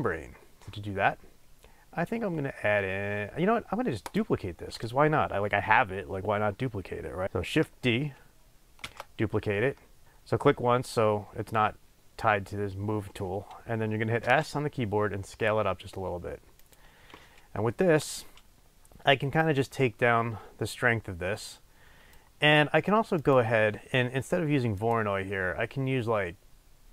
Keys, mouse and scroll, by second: 4.0-7.2 drag, 7.2 ctrl+d, 8.8 shift+d, 16.7 click.